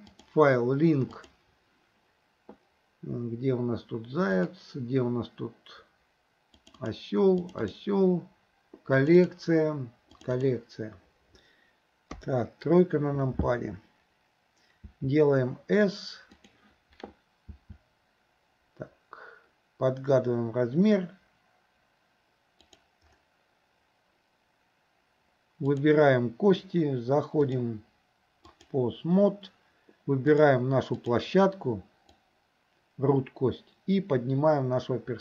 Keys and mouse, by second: 0.3-1.5 drag, 12.2 KP_3, 14.9 s, 17.5 s, 27.5-28.8 drag, 30.4 click, 31.0 click, 32.2-35.2 drag.